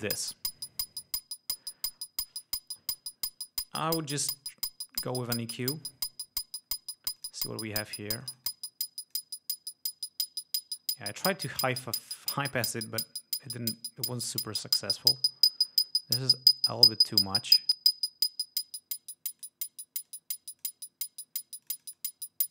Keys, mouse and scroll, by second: 4.5 scroll down 2, 5.2 click, 7.4 click, 8.3-9.5 drag, 10.1-10.5 scroll up 2, 11.0 scroll down 2, 11.4 click, 12.0 scroll down 2, 13.8 click, 15.4-16.1 scroll up 4, 16.1-16.5 scroll down 4, 16.2 click, 20.4-21.1 drag, 21.9-22.5 drag.